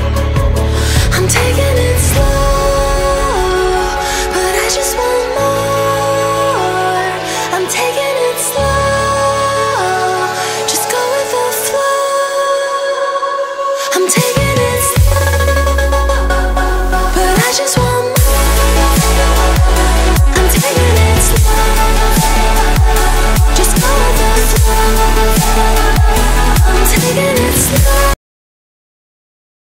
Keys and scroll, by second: 4.0 ctrl+g, 11.4 space, 25.6 Down, 26.5 Up, 28.1 Delete.